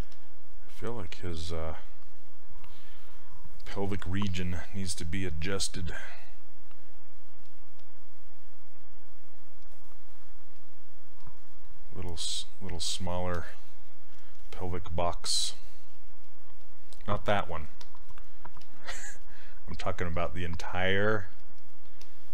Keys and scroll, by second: 0.1 s, 16.0 s, 18.6 s.